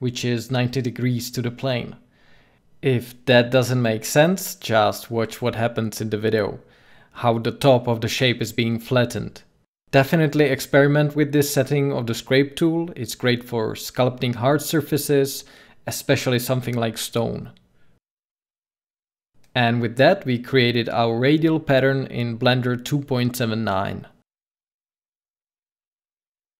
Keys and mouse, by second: 3.5 ctrl+z, 5.9-9.8 drag, 16.3-20.0 drag, 20.4 middle click, 21.3 middle click.